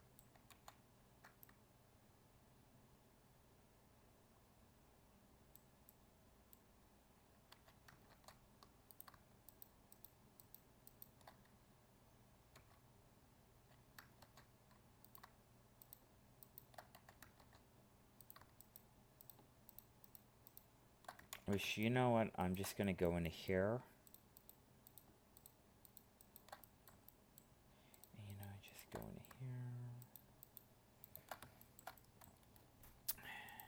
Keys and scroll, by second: 0.5 ctrl+z, 8.1 ctrl+Tab, 14.2 ctrl+Tab, 17.4 ctrl+Tab, 21.3 ctrl+z.